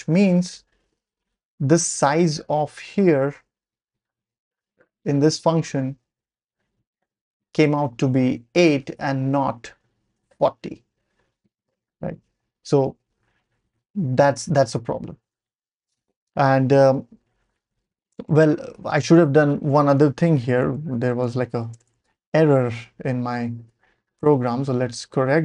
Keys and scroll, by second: 20.9 ctrl+l, 21.2 m, 21.7 BackSpace, 21.8 BackSpace, 22.6 Page_Up, 22.8 Page_Up, 23.7 Page_Up, 24.2 Return, 24.7 Page_Down, 24.8 Page_Down, 25.1 Page_Up, 25.3 Page_Up.